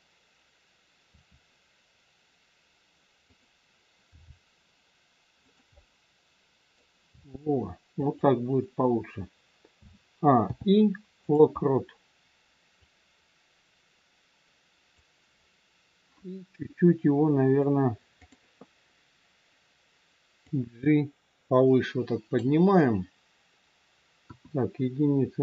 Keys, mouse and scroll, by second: 1.1 r, 4.1 g, 5.7 middle click, 7.0 g, 9.6 a, 10.3 i, 12.7 click, 15.3-15.7 scroll down 2, 18.1 click, 20.4 click, 24.1 KP_1.